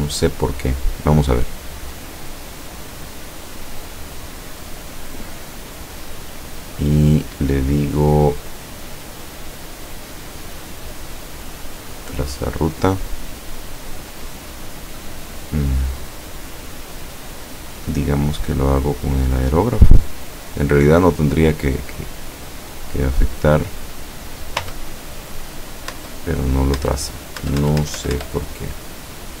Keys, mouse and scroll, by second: 0.7 click, 2.9 click, 3.8 click, 4.8 click, 5.6 click, 12.0 click, 15.2 click, 19.1 click, 21.7-22.6 drag, 23.4 click, 24.6 Return, 25.9 Return, 26.8 Return.